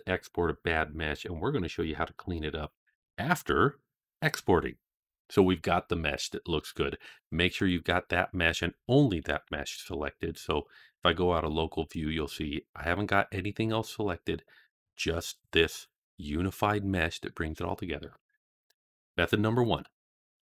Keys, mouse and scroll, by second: 7.4 click, 9.3 KP_Divide, 11.0-11.4 middle drag, 11.8 click, 12.7 click, 13.5 click.